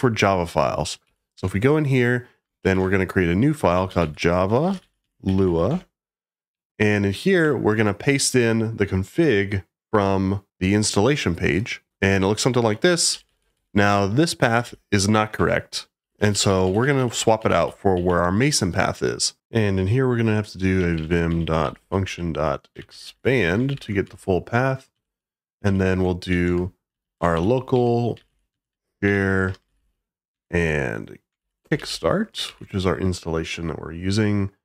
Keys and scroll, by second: 1.0 j, 1.3 Return, 2.6-5.9 typing, 7.3 i, 11.9 super+v.